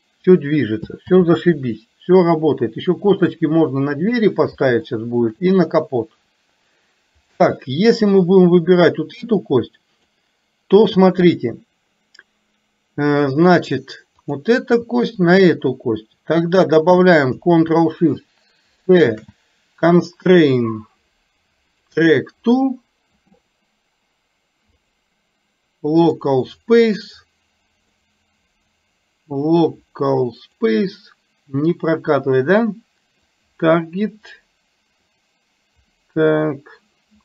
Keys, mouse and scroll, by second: 1.4 ctrl+z, 5.0 shift+middle drag, 7.4 click, 8.6-10.2 drag, 15.2 shift+click, 19.1 ctrl+shift+c, 24.9-26.4 drag, 28.0-30.7 drag, 33.5 click, 35.1-37.2 drag.